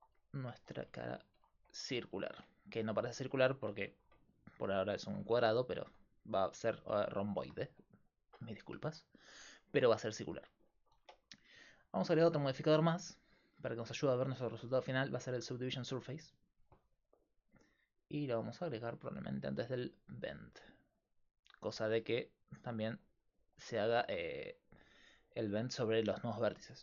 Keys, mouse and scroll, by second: 0.6 s, 2.0 Tab, 5.5 middle click, 12.3-16.0 drag, 18.8 click, 19.1 right click, 19.8 click, 20.8-21.9 middle drag, 22.8 middle click.